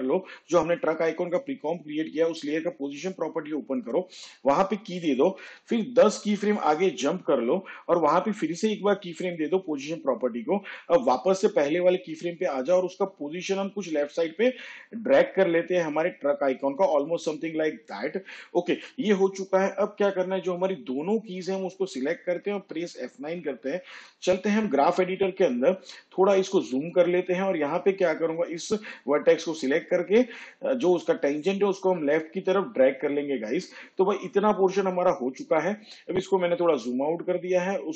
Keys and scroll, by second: 5.9 shift+Page_Down, 22.6 F9.